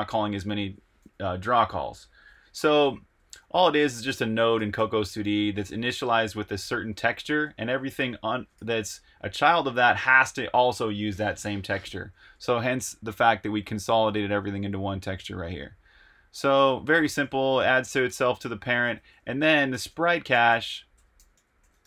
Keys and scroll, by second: 3.0 Escape, 3.1-7.5 typing, 5.9 Escape, 7.4 Escape, 8.5 shift+v, 9.3 j, 11.7 super+Tab, 15.2 super+Tab, 16.7-21.8 typing.